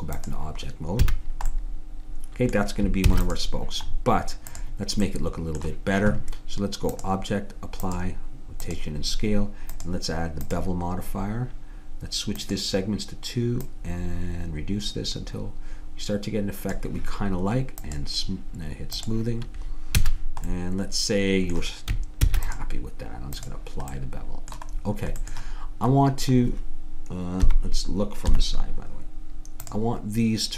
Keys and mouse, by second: 1.0 a, 3.1 ctrl+s, 9.8-15.5 drag, 17.9-20.8 drag, 20.1 a, 22.3 ctrl+s, 27.4 KP_1, 28.4 KP_3, 29.7-30.5 middle drag.